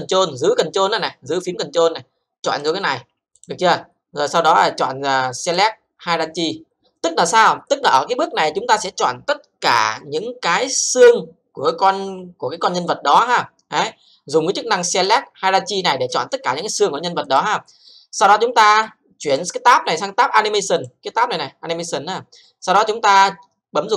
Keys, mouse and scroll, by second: 2.6 ctrl+click, 5.4 click, 6.3 click, 15.1 click, 17.2 click, 20.7 click.